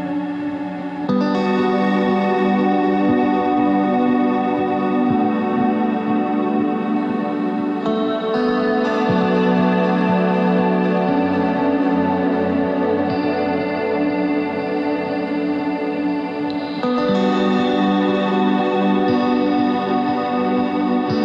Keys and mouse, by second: 0.6 c, 3.0 s, 4.9 z, 5.2 Tab, 7.7 right click, 8.6 Tab, 13.0 ctrl+r, 14.9 ctrl+r, 16.8 ctrl+Tab, 18.2 ctrl+r, 20.5 ctrl+Tab.